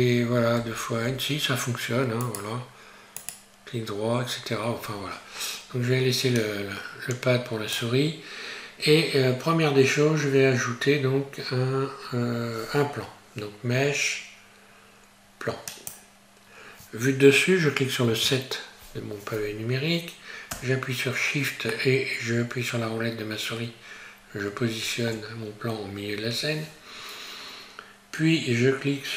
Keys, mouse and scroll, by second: 0.6 n, 0.7 n, 2.2 right click, 18.0 KP_7, 21.7 shift+middle click.